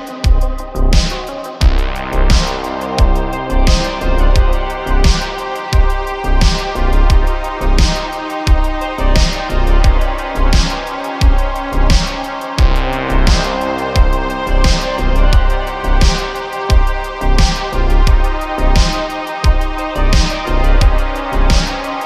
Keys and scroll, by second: 0.0 z, 0.3 z, 0.5 y, 2.7 shift+d, 2.9 y, 4.9 x, 6.5 x, 7.5 shift+d, 7.7 y, 9.0 s, 9.2 y, 9.3 y, 14.7 s.